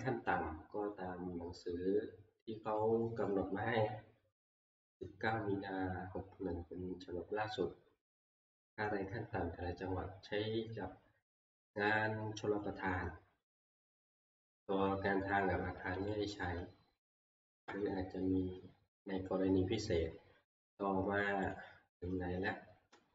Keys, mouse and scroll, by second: 0.5-1.0 scroll down 2, 2.8 click, 3.3 click, 15.8 click, 16.1 ctrl+click, 21.5 ctrl+click.